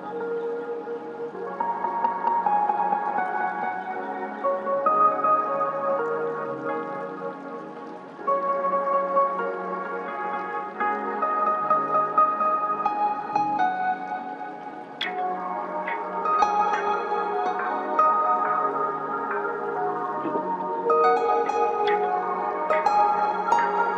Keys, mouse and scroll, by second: 3.4 click, 5.8 g, 6.1-8.5 drag, 17.7 click, 18.6 scroll up 1, 20.3 click.